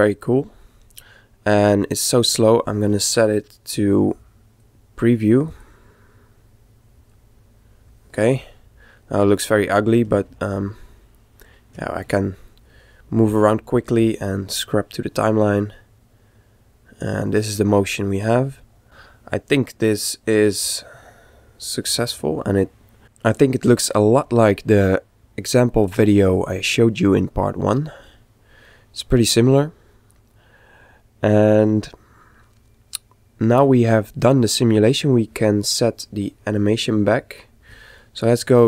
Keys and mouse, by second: 4.0 click, 5.7 click, 8.5-14.6 middle drag, 14.6 click, 27.7-29.5 middle drag, 36.6-38.4 right drag, 38.4 click.